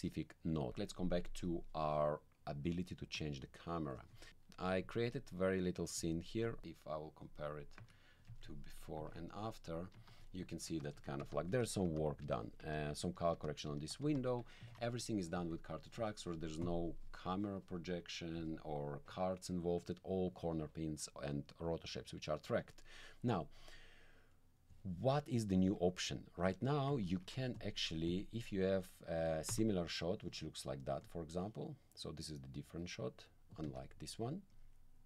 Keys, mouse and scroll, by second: 1.4 click, 4.4 alt+middle click, 4.6 click, 4.9 alt+click, 5.4 alt+middle click, 6.4 click, 7.2 click, 7.8 1, 8.3 alt+middle click, 9.1 alt+click, 9.4 alt+click, 9.9 alt+2, 10.4 alt+1, 10.6 alt+2, 10.9 alt+1, 11.2 alt+2, 11.5 alt+1, 11.8 alt+2, 12.2 alt+1, 12.6 alt+2, 13.0 alt+1, 13.3 alt+2, 13.7 alt+1, 14.0 alt+2, 14.7 alt+click, 15.4 alt+click, 16.6 click, 23.6 click, 24.3 click, 25.1 click, 26.0 click, 27.0 alt+click, 27.6 alt+click, 28.1 click, 29.5 1, 31.0-33.2 drag, 33.5 click, 33.6 1, 34.5-35.0 drag.